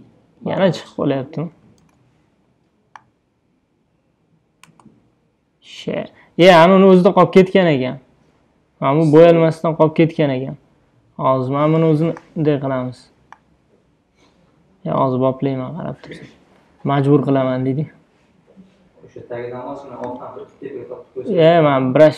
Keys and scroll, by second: 1.8 super+t, 4.7 Return, 7.4 super+z.